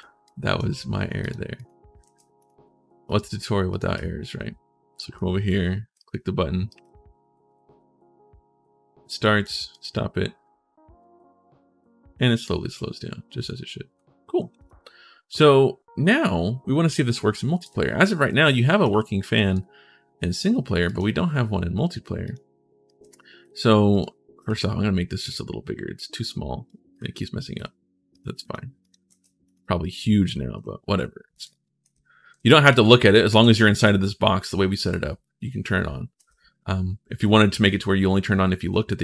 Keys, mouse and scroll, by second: 0.0 click, 1.0 click, 1.3 click, 1.8 ctrl+shift+s, 2.2 click, 2.8 click, 3.5 right click, 3.7 w, 4.9 d, 5.8 right click, 6.5 right click, 6.5 click, 9.5 click, 18.0-19.3 right drag, 18.7 w, 18.9 d, 20.6 click, 22.0 right click, 22.6 right click, 22.8 s, 23.7 right click, 25.0-26.4 drag, 26.7 right click, 26.7 s, 27.9 click, 28.2 click, 28.6 click, 28.8 ctrl+shift+s, 29.6-34.6 typing, 35.9 d.